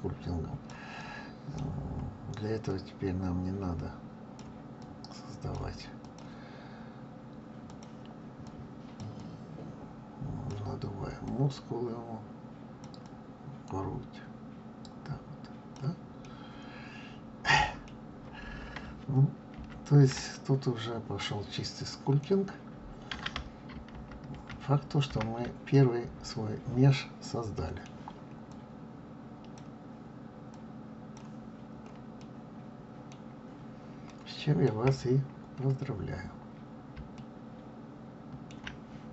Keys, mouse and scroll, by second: 0.9-2.6 middle drag, 2.6-6.1 drag, 7.6-16.0 drag, 16.1-19.1 middle drag, 19.5 ctrl+z, 20.2-23.3 middle drag, 23.8 ctrl+z, 24.2 ctrl+z, 24.9 ctrl+z, 25.6-28.4 middle drag, 28.4-32.1 drag, 32.1-33.2 middle drag, 33.2-34.0 scroll down 3, 34.0 middle click, 34.9-36.0 scroll up 4, 36.3 scroll down 1, 37.0-39.1 shift+middle drag.